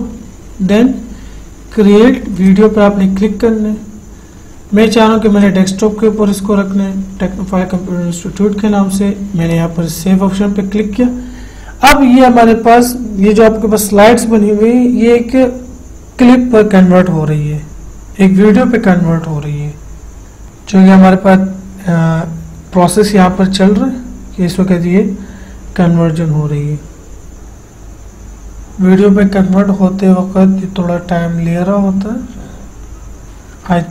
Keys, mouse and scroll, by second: 2.7 click, 5.7 click, 9.8 click, 9.8 click.